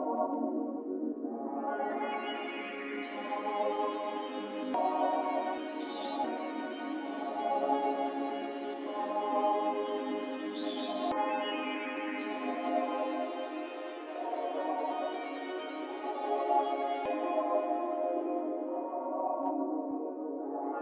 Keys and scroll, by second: 11.0 typing.